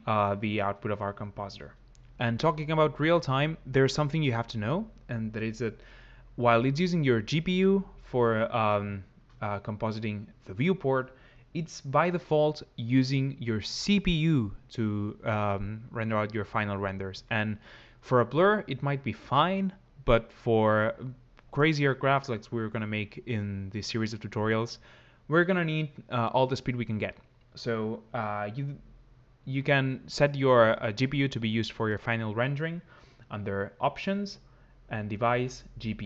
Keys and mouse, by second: 34.8 click.